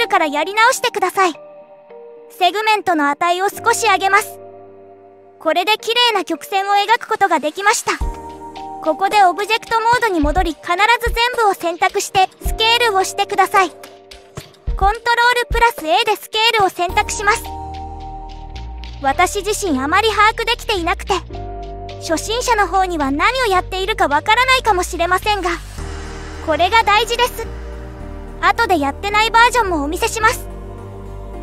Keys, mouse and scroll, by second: 4.1-5.3 drag, 7.3 click, 9.6 Tab, 12.9-14.2 scroll down 1, 14.2-14.7 scroll down 1, 14.7-15.2 scroll down 1, 17.4 click, 18.9-20.7 drag, 30.2 click.